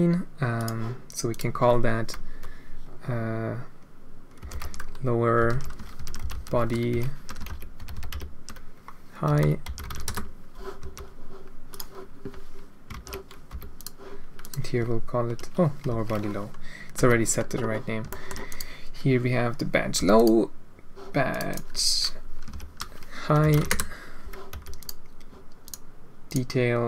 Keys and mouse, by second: 1.3-6.1 drag, 7.9 shift+BackSpace, 10.8 g, 12.9 ctrl+c, 13.5 h, 13.7 click, 14.4-16.1 drag, 16.9 h, 18.1 shift+middle drag, 18.4 click, 20.1 click, 21.3-23.0 drag, 23.0-24.2 right drag, 24.5 h, 24.7 right click, 25.6 click, 26.2 click.